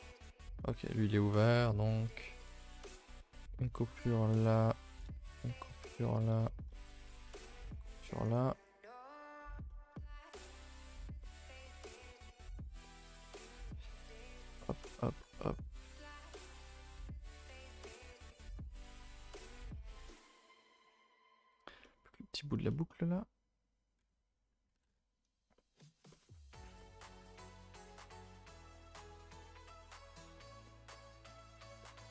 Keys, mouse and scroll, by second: 0.0 middle click, 0.9 scroll down 2, 1.1-2.9 middle drag, 2.9 alt+click, 3.3-5.7 middle drag, 5.7 alt+shift+click, 6.1-7.7 middle drag, 7.7 alt+shift+click, 8.0-8.6 scroll down 2, 8.6 right click, 8.9 scroll down 1, 9.1 shift+middle click, 10.0-11.0 scroll up 4, 11.0 alt+click, 11.2-12.5 middle drag, 12.5 scroll up 4, 12.8-14.5 middle drag, 14.5 alt+shift+click, 16.7 right click, 16.9 a, 17.0 a, 17.1 scroll down 5, 17.3 middle click, 17.8-18.6 scroll down 5, 18.6 alt+h, 19.0 scroll down 2, 19.2 a, 19.3 a, 19.4 middle click, 19.6-20.0 scroll up 4, 20.0 shift+middle click, 20.2 scroll down 2, 20.4 shift+middle click, 20.7 3, 21.4 l, 21.6 scroll down 2, 21.8 middle click, 22.5 scroll down 2, 22.7 middle click, 22.9-24.0 scroll up 1, 24.0 l, 24.7 ctrl+i, 24.9 h, 25.5 middle click, 26.2-26.8 scroll up 7, 26.8 shift+middle click, 27.4 scroll down 4, 27.6 shift+middle click, 27.8-28.5 scroll up 4, 28.5-29.1 scroll up 9, 29.1 shift+middle click, 29.8 scroll down 3, 30.0-32.1 shift+middle drag.